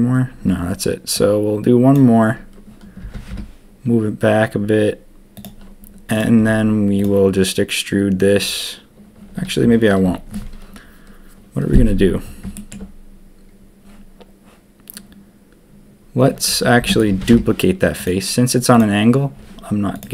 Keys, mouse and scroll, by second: 1.9 click, 3.0 g, 6.1 click, 16.8 shift+d, 17.1 g.